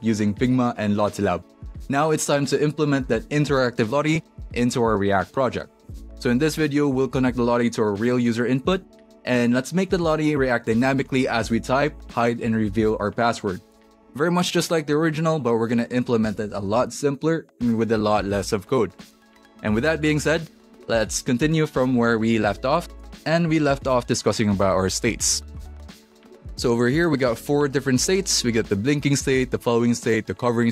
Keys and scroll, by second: 3.0-8.3 typing.